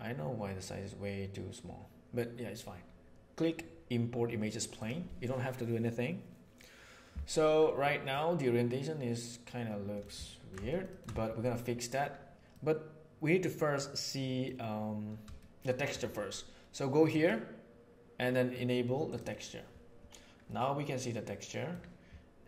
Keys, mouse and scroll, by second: 8.1-9.9 middle drag, 10.2 ctrl+middle click, 10.6 shift+middle click, 12.5-14.4 middle drag, 15.6 middle click, 17.0-19.6 right drag, 20.4-21.7 middle drag.